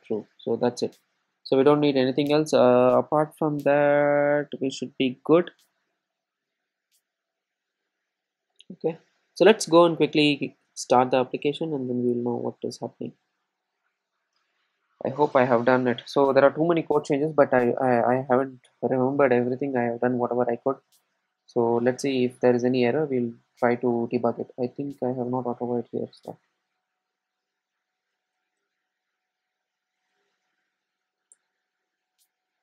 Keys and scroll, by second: 1.5 Tab, 31.5 Return.